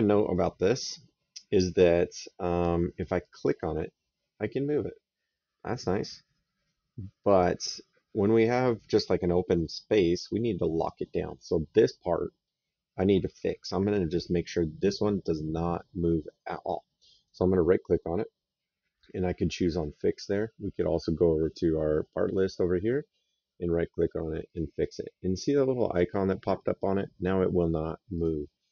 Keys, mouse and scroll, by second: 0.1 right click, 3.0 click, 9.4 right click, 17.0 right click, 20.5 click, 22.2 right click, 24.3 click, 28.0 click, 28.6 middle click.